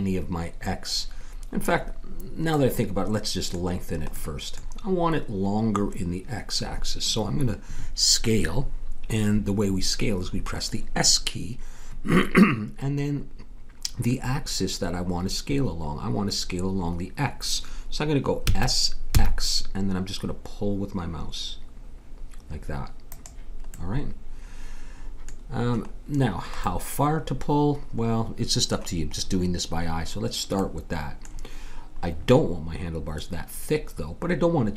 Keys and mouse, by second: 2.3-7.6 middle drag, 18.4 s, 23.7 middle click.